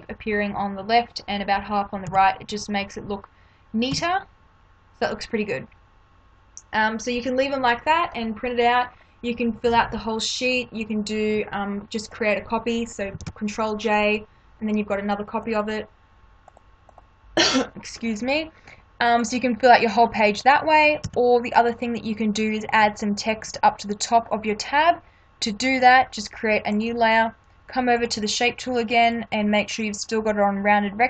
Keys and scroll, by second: 2.0 Left, 3.9 Left, 13.2 ctrl+j, 21.0 Delete.